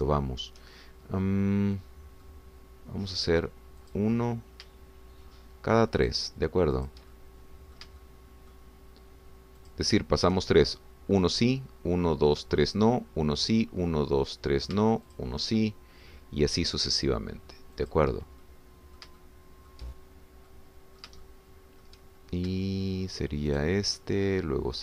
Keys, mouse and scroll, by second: 0.1 shift+middle click, 1.8-3.4 shift+middle drag, 5.0 click, 7.0-8.1 shift+drag, 8.2 shift+middle click, 9.0 shift+middle click, 10.7 shift+click, 16.2 shift+click, 19.0 shift+click, 19.4 shift+middle click, 20.1 shift+click, 21.5-23.0 drag, 24.5 shift+click.